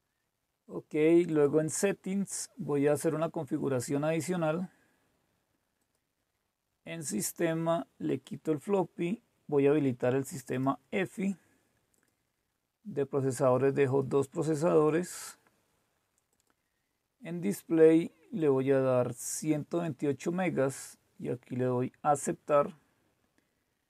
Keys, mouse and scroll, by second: 1.3 click, 5.8 click, 8.1 click, 10.5-13.5 drag, 13.9 click, 16.3 click, 18.4-21.3 drag, 22.1 click.